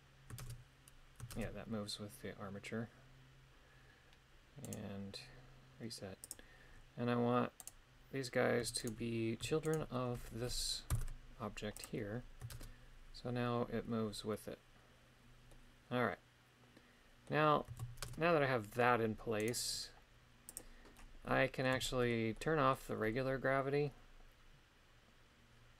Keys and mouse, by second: 0.4 shift+space, 1.3 shift+space, 4.7 right click, 6.3 click, 7.6 right click, 8.8 shift+right click, 9.7 shift+right click, 10.9 ctrl+p, 12.5 shift+space, 15.5-17.3 middle drag, 18.1 shift+space, 19.4 right click, 20.6 click, 21.3 middle click, 21.8 shift+middle click, 22.4 middle click.